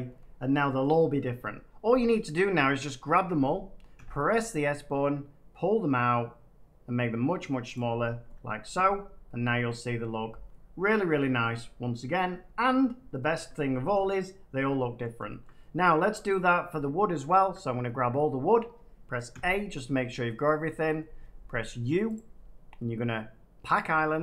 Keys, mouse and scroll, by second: 0.0 middle click, 0.1 middle click, 0.6 scroll, 2.2 Tab, 3.4 scroll, 3.9 s, 7.7 click, 8.1 Tab, 8.9 scroll, 9.8 middle click, 10.8 middle click, 12.9 middle click, 13.3 shift+middle click, 14.2 middle click, 14.3 scroll, 14.9-15.9 scroll, 16.3 click, 17.3 Tab, 19.2 a, 20.2-20.5 scroll, 22.1 click, 23.7 click.